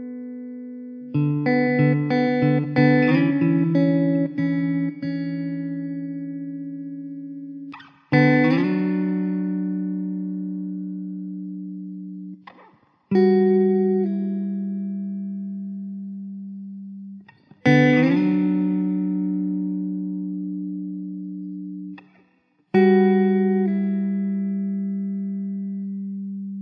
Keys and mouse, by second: 0.9 middle click, 1.2 w, 20.6 e, 21.0 r.